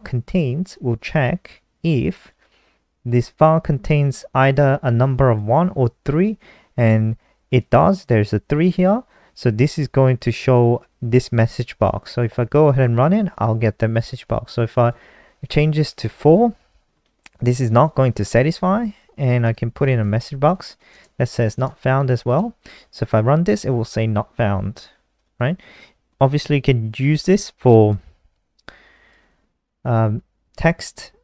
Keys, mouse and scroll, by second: 7.9 click, 10.8 click, 12.1 shift+click, 12.4 ctrl+s, 12.8 F5, 14.6 click, 15.2 click, 15.9 BackSpace, 16.0 BackSpace, 16.5 ctrl+s, 18.7 Down, 18.8 Down, 18.9 Down, 19.1-22.9 typing, 23.1 F5, 25.5 click, 27.8 ctrl+c, 28.2 click, 28.6 click, 29.6 ctrl+v.